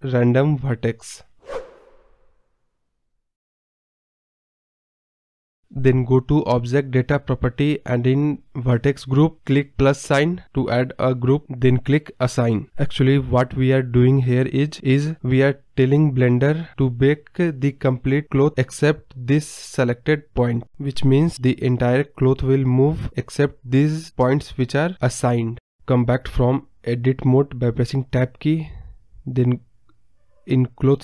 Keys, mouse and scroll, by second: 6.1 shift+click, 7.4 shift+click, 9.8 click, 10.6-13.5 drag, 14.4-16.2 drag, 16.2 KP_Decimal, 16.7 scroll up 4, 17.3-26.6 scroll down 2, 26.6 Tab, 27.0-27.4 scroll down 3, 28.7 click, 29.3-31.0 scroll down 31.